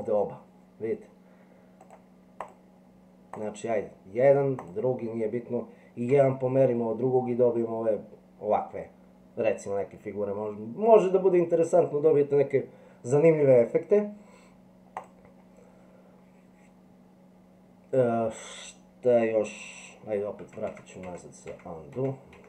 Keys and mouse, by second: 1.8 click, 2.4 click, 4.6 click, 6.1 g, 20.4 ctrl+z, 20.7 ctrl+z, 21.5 ctrl+z, 22.3 ctrl+z.